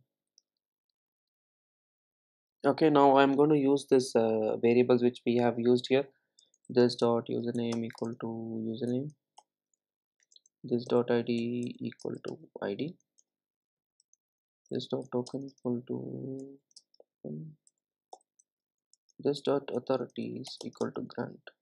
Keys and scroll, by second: 7.6 Return, 15.1 Return.